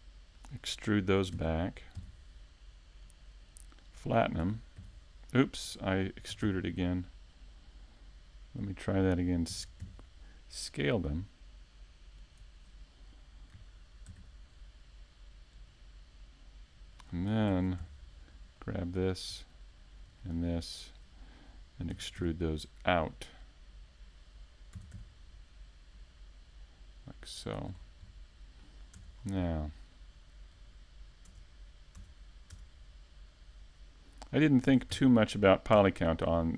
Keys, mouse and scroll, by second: 0.5-0.9 scroll up 2, 0.9 shift+middle click, 1.4-2.1 scroll up 1, 2.1 scroll up 1, 2.1 s, 3.6 click, 3.8-4.2 scroll up 3, 4.1 shift+middle click, 4.4 Tab, 4.8 right click, 5.3 s, 6.7 Tab, 7.2 shift+middle click, 7.2-7.9 scroll up 3, 8.0 middle click, 9.2 KP_Decimal, 9.8 middle click, 10.6-11.2 scroll down 7, 11.2 middle click, 12.2 click, 13.2-13.7 scroll down 2, 13.5 middle click, 14.3 Tab, 14.4-14.9 scroll up 1, 15.0 scroll up 3, 15.1 ctrl+Tab, 17.3 a, 18.0 ctrl+Tab, 18.8 alt+right click, 19.9 alt+shift+right click, 23.2 n, 24.9 Tab, 26.6 ctrl+a, 28.6 n, 29.3 Tab, 30.9 ctrl+b, 33.9 shift+click, 34.9 click, 35.9 middle click.